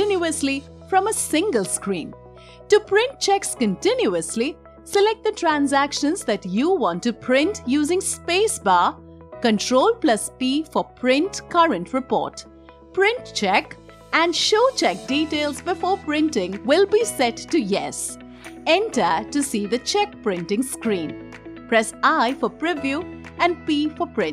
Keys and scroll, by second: 9.8 ctrl+p, 21.6 i, 23.8 p.